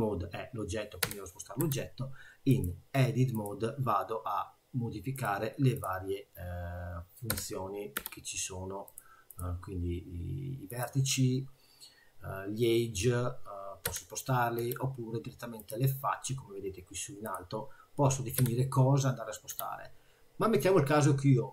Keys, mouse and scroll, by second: 1.1 g, 2.5 click, 5.2 click, 5.8 click, 7.3 g, 8.9 click, 9.3 click, 10.7 click, 14.0 g, 15.6 click, 17.2 click, 18.5 g.